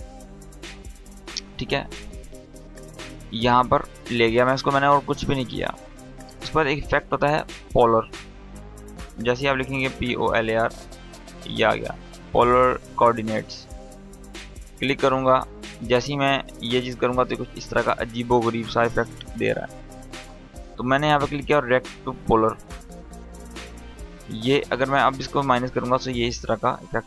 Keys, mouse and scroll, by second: 0.1-0.5 scroll up 1, 1.5 click, 2.6-3.0 scroll down 1, 3.9 click, 9.2-9.9 typing, 12.6-14.2 drag, 24.5-27.0 drag.